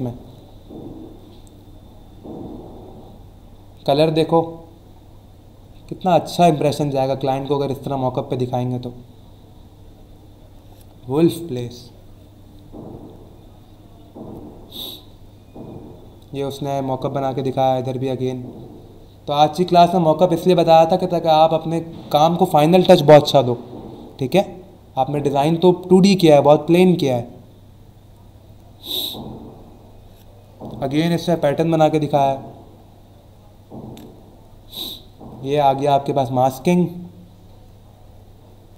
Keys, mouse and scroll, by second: 1.3 scroll down 1, 2.4-4.5 scroll down 6, 9.1-10.2 scroll down 3, 13.6-14.0 scroll down 2, 14.6-15.2 scroll down 2, 15.8 scroll down 1, 16.2 scroll up 1, 17.3-18.8 scroll down 4, 19.7 scroll down 1, 20.7 scroll down 1, 23.7 scroll down 1, 24.5 scroll down 1, 27.4 scroll down 1, 28.5-29.2 scroll down 2, 29.5 scroll down 1, 30.0 scroll up 1, 31.7-32.3 scroll down 2, 32.8-33.2 scroll down 2, 34.2 scroll down 1, 35.1 scroll up 1, 37.1-38.7 scroll down 5.